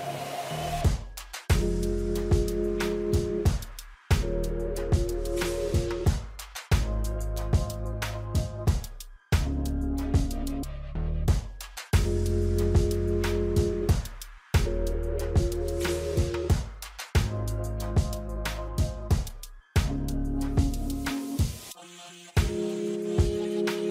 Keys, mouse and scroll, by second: 0.6-3.5 drag, 3.8-4.2 scroll up 1, 4.2-11.0 drag, 13.8-17.1 drag, 18.9-19.4 scroll up 1, 19.5 alt+scroll up 1, 20.1-23.9 drag.